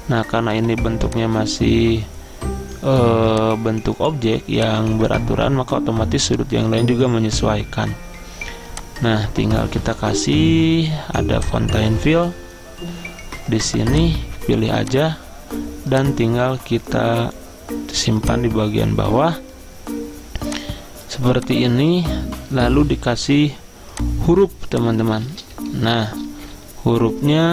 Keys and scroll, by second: 25.6 1.